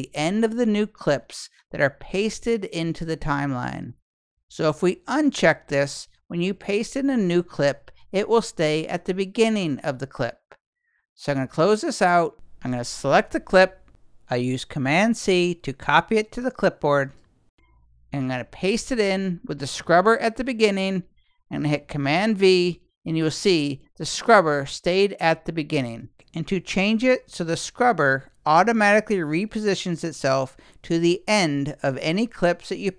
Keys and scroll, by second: 15.1 super+c, 22.1 super+v.